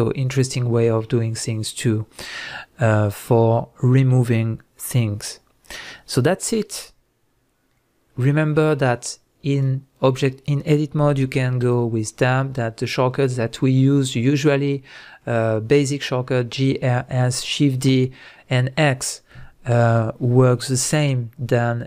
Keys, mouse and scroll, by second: 7.7-8.1 scroll down 1, 8.1 scroll up 1, 8.9 click, 9.5 click, 11.4 Tab.